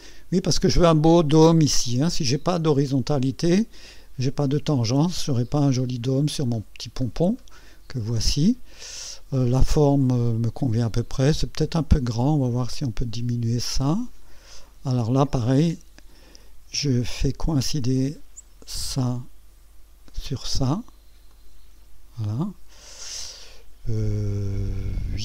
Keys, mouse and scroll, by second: 6.0-7.6 scroll down 4, 9.3-10.5 right drag, 10.7 scroll up 1, 12.6-15.2 drag, 18.7 click, 20.1 click, 21.3 click.